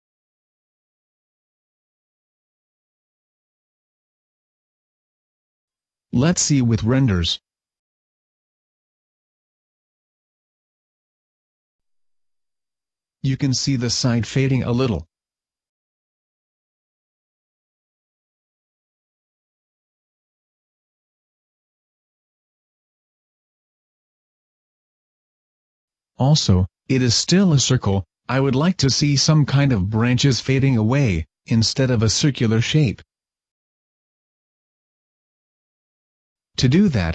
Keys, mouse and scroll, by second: 5.8 click, 8.9 click, 17.8 Escape, 19.2 click, 20.3 click, 21.7 click, 23.0 click, 23.8 click, 25.2 scroll up 1.